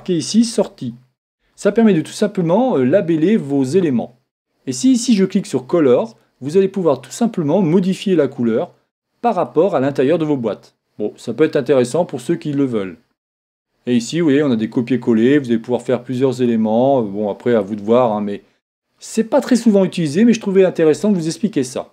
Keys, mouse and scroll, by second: 5.2-9.1 drag, 13.4-15.3 drag, 17.9 click.